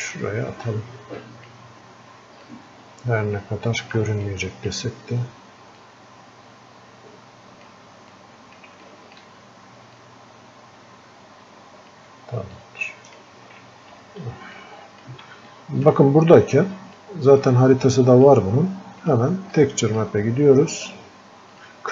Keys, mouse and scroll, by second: 8.9-10.3 alt+drag, 10.3-15.8 drag, 15.8-17.3 alt+drag, 17.3-21.9 drag.